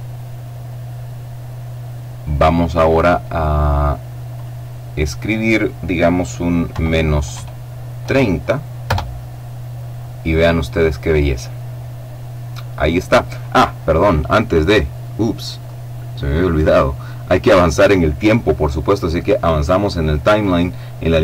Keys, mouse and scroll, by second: 4.0 click, 6.3 KP_Subtract, 6.9 KP_3, 7.7 KP_0, 8.5 KP_Enter, 15.3-17.2 drag.